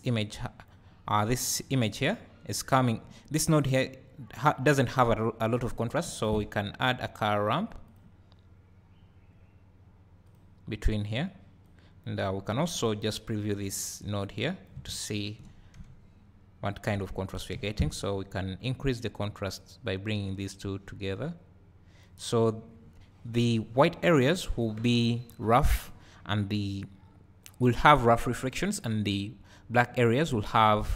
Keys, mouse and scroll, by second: 2.0-11.3 drag, 13.8-14.3 drag, 15.0-15.9 ctrl+shift+drag, 17.2 scroll down 2, 17.6 `, 19.8-27.5 drag.